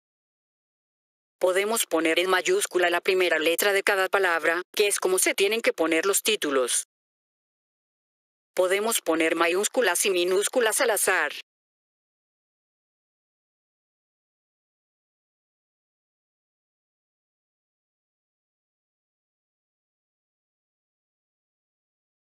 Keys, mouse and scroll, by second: 1.4 click, 2.3 click, 2.8-3.5 drag, 3.9 click, 5.5 click, 7.5 click, 12.6 click, 14.8 click, 18.3 click, 21.1-21.7 drag.